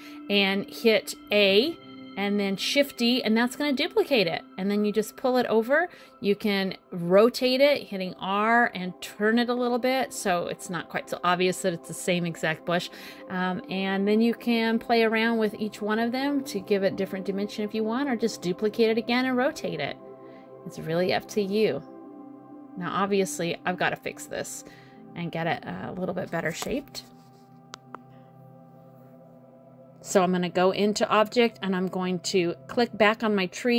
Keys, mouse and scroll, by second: 0.8 click, 3.0 click, 4.3 r, 6.3 middle click, 7.3 scroll down 1, 7.3 middle click, 8.3 click, 9.3 click, 10.0 middle click, 12.6 shift+d, 13.5 middle click, 14.7 click, 16.2 click, 17.0 middle click, 17.9 click, 18.3 middle click, 19.5 click, 20.2 middle click, 22.0 middle click, 23.0 middle click, 25.4 click, 26.0 middle click, 27.7 click, 29.0 click, 30.3 click, 31.0 middle click, 31.7-32.2 scroll up 2, 33.2 scroll down 1.